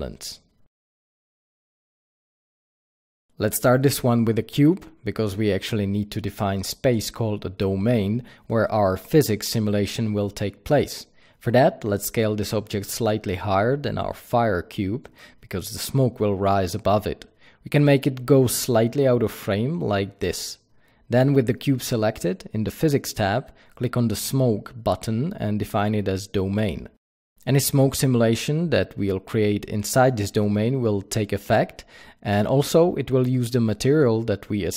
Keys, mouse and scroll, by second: 2.7-6.8 drag, 2.7 shift+a, 5.2 g, 7.5 s, 8.6 click, 8.8 s, 10.4 click, 10.6 g, 12.4 click, 12.8 KP_0, 14.8 s, 15.5 click, 15.6 g, 16.6 click, 22.0 click, 25.3 click, 26.2-34.7 drag, 32.7 t.